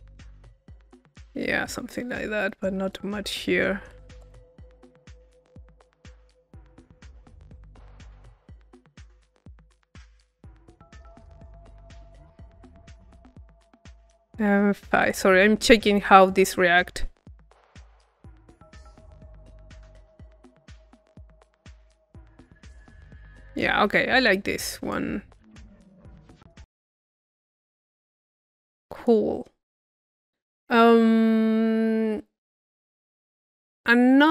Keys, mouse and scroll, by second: 1.9 click, 3.0 click, 13.7 click, 16.0 click, 18.8-20.2 drag, 21.8-23.2 middle drag, 23.2-25.5 drag, 26.5 click, 27.2-28.5 middle drag, 28.5-29.6 drag.